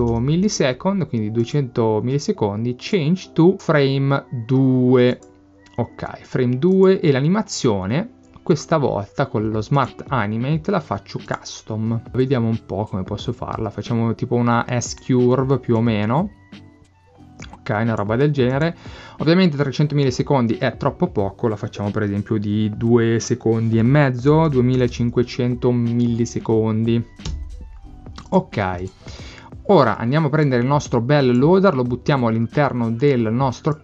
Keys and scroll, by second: 0.0 0, 24.1-25.3 typing, 27.3 Return.